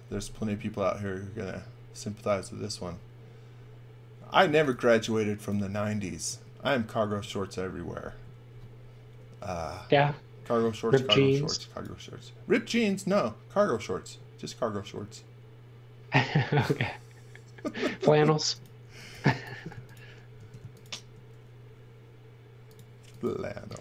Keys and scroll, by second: 4.4 x, 4.7 v, 6.3 space, 10.8 x, 11.1 v, 16.3 space, 18.8 x, 19.1 v, 20.4 space.